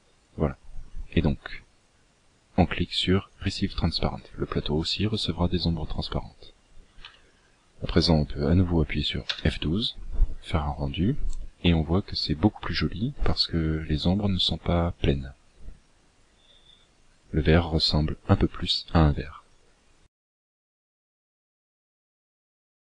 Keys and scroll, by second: 5.8 KP_1.